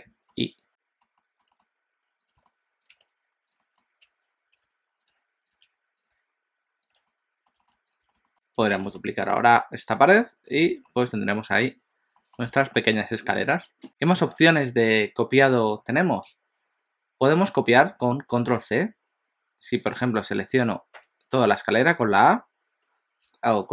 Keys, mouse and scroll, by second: 0.4 middle click, 1.2 middle click, 1.5 s, 2.4 g, 2.9 g, 3.6 middle click, 4.0-6.1 typing, 7.0 alt+a, 7.1 middle click, 7.6 shift+middle click, 7.8 click, 8.1 shift+middle click, 8.2 middle click, 8.8 shift+d, 10.7 alt+a, 10.9 middle click, 11.9-12.2 scroll down 1, 12.2 middle click, 12.5 shift+middle click, 21.1 a.